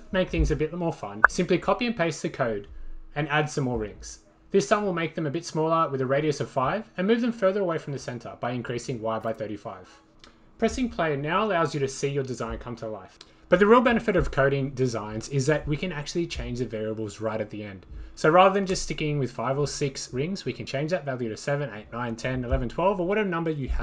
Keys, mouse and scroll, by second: 0.9 click, 4.5 click, 6.2 click, 6.9 5, 7.6 click, 8.7-10.2 click, 9.2 click, 10.3 click, 10.9 click, 14.4 click, 17.4-18.9 drag, 23.0-23.8 drag.